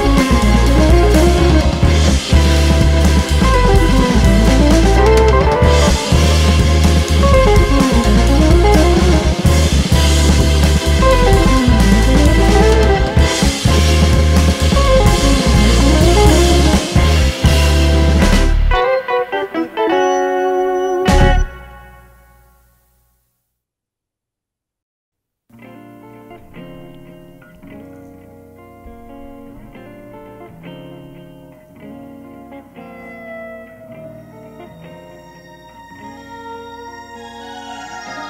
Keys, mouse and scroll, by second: 0.3-0.7 scroll down 2, 1.0 scroll down 2, 1.1 `, 4.1-4.4 scroll up 2, 4.4 `, 4.9-5.3 scroll up 2, 5.5 `, 7.0-7.3 scroll down 1, 7.7 `, 11.5 Tab, 12.3 `, 12.9-13.4 scroll down 1, 13.4 KP_1, 14.9 scroll up 1, 15.7 click, 16.1 scroll up 1, 16.8 alt+a, 17.1 c, 18.1 g, 18.1 click, 19.7 2, 20.1 `, 21.1 KP_1, 21.5-21.9 scroll up 2, 23.9 Tab, 24.3-24.9 scroll down 2, 24.9 scroll up 2, 25.0 Tab, 25.3 ctrl+r, 26.9 scroll up 1, 28.0 scroll up 1, 28.2 1, 28.4 click, 28.6 shift+click, 29.2 alt+m, 29.7 click, 29.9 shift+click, 31.0 alt+a, 31.7 `, 32.3 2, 32.7 click, 33.0 alt+click, 33.2 ctrl+x, 33.8 KP_1, 34.0-34.5 scroll down 1, 34.8 alt+a, 35.9 ctrl+r, 37.6 scroll up 1, 37.8 typing.